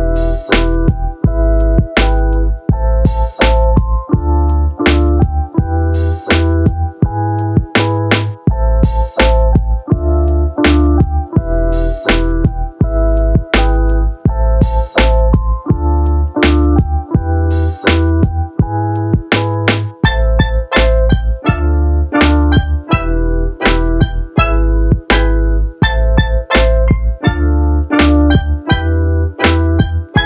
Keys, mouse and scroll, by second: 1.6 Tab, 2.7 a, 3.2 a, 4.5 click, 5.4-5.8 middle drag, 6.6 shift+middle drag, 7.5-11.1 middle drag, 11.1 Tab, 12.0 a, 12.6 alt+n, 14.2 Tab, 15.7-17.1 drag, 17.2 click, 17.4 click, 18.1 click, 18.4 click, 18.6 click, 19.0 click, 19.6 n, 20.8 z, 22.2 click, 22.9-24.5 drag, 29.5 click.